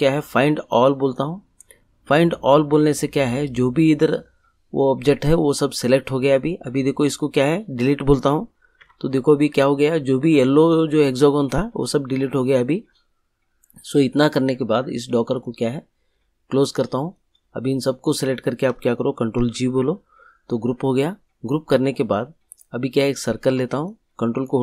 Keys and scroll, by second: 8.8 Delete, 19.3 ctrl+g.